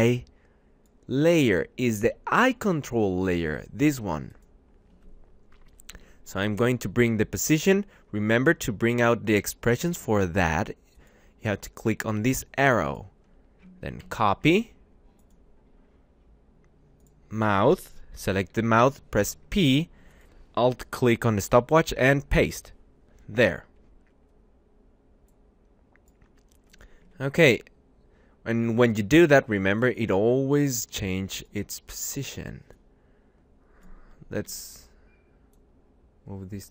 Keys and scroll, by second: 5.7 p, 13.6 ctrl+c, 18.6 p, 21.5 ctrl+v, 22.1 Return, 27.1 `, 34.4 y.